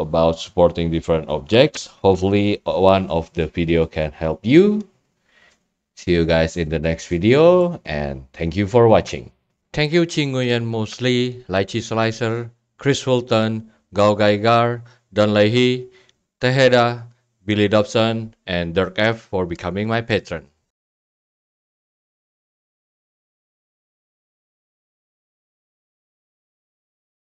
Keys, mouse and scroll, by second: 4.0-4.8 scroll down 6, 4.8 scroll, 7.1-7.7 scroll, 8.8 right click, 19.7-20.7 drag.